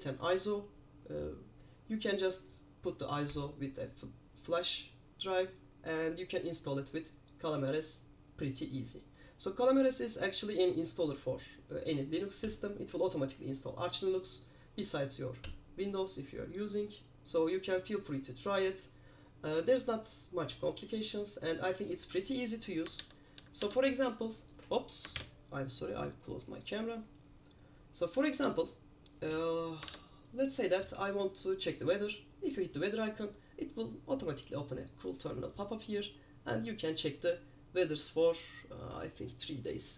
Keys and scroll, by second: 23.1 super+q, 23.5 super+q, 25.3 super+F11, 30.0 super+q.